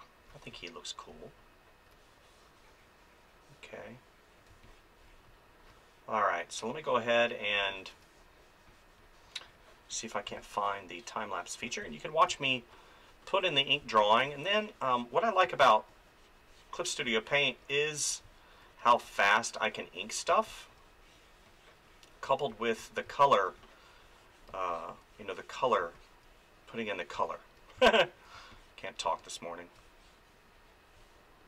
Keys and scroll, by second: 4.5 space, 7.6 space, 10.3 space, 15.5 space, 17.1 space, 20.3 space, 23.0 space.